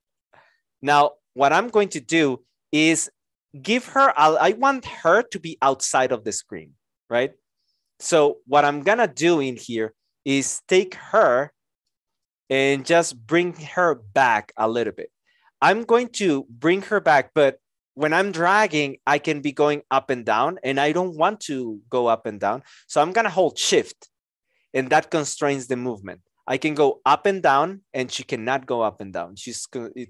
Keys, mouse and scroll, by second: 0.1 Delete, 23.4 shift+click.